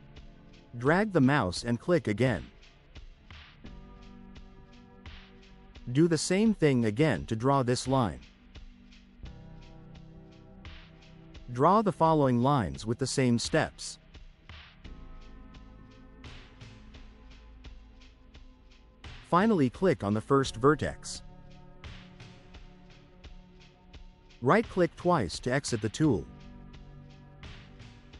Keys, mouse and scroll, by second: 3.7 click, 4.2-4.6 scroll down 4, 5.2 right click, 6.2-6.6 scroll up 4, 6.6 middle click, 9.4 click, 12.2 click, 15.1 click, 18.6 click, 21.7 click, 24.4 right click, 25.5 right click.